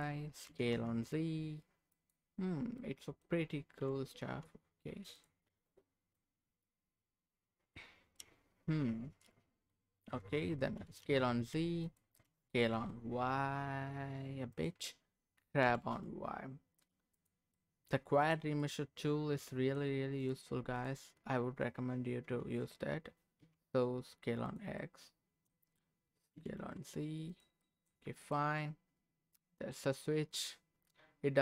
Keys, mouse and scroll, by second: 0.5 s, 0.7 z, 1.9 click, 2.3 scroll up 1, 2.8 middle click, 3.8 g, 4.2 z, 5.1 click, 5.4 scroll down 1, 5.7 middle click, 6.6-7.8 middle drag, 7.9 scroll up 1, 8.1-9.7 middle drag, 9.8 scroll down 1, 10.1 middle click, 10.7 s, 11.0 z, 11.8 click, 12.2 s, 12.7 y, 14.5 click, 15.6 g, 15.9 y, 17.1 click, 17.5 middle click, 18.2 click, 18.6-19.9 middle drag, 20.2 click, 20.7 click, 22.2 s, 23.4 x, 24.4 click, 24.8 middle click, 26.3 s, 26.6 z, 27.3 click, 27.6 middle click, 28.2 click, 28.6-29.7 middle drag, 29.7 click, 30.3-31.4 middle drag, 31.0-31.4 scroll up 1.